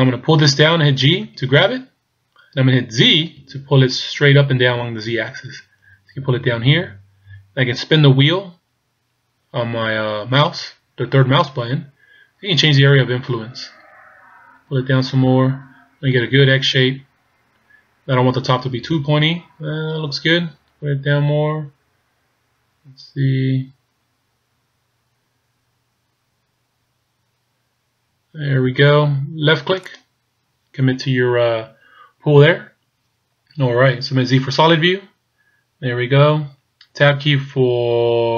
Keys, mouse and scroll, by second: 1.3 g, 34.6 z.